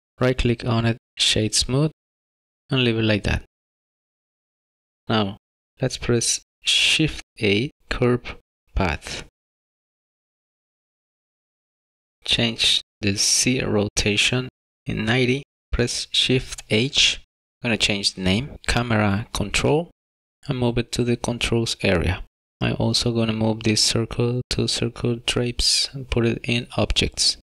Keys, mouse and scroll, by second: 0.1 middle click, 0.1 scroll up 2, 0.4 right click, 2.5 middle click, 7.4 shift+a, 12.3 click, 17.6 click, 21.4 click, 22.7 click, 22.9 click, 26.9 click.